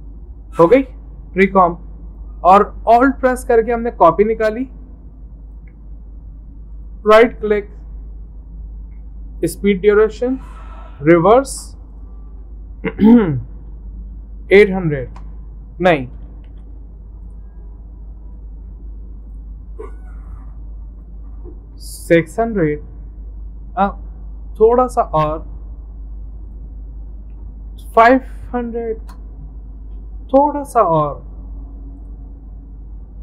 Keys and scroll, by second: 14.3-15.3 typing, 16.5 ctrl+z, 21.9-23.8 typing, 27.2-29.7 typing.